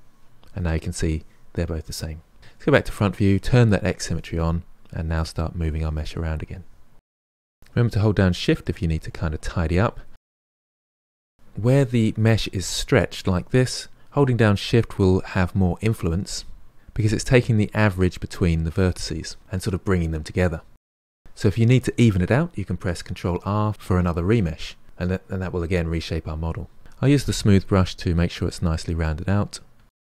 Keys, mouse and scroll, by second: 0.4-2.4 middle drag, 2.4 KP_1, 3.8 click, 4.8-6.2 drag, 6.2 KP_3, 6.3 click, 6.6 middle click, 6.8 click, 7.0 middle click, 7.2 click, 7.7 middle click, 8.3 shift+click, 8.9 middle click, 9.2 f, 9.4 middle click, 9.5 click, 9.9 middle click, 10.1 shift+click, 10.2 middle click, 10.3 shift+click, 10.5 middle click, 10.6 shift+click, 10.7 middle click, 11.1 shift+click, 11.3 middle click, 11.7-13.4 drag, 13.4-15.2 middle drag, 15.2-18.6 drag, 18.6 middle click, 19.3 f, 19.7-21.2 drag, 23.1 ctrl+r, 23.9 click, 24.4 middle click, 24.9 click, 25.6 KP_1, 25.7-28.7 drag, 29.0 middle click, 29.6 shift+click, 29.8 ctrl+middle click.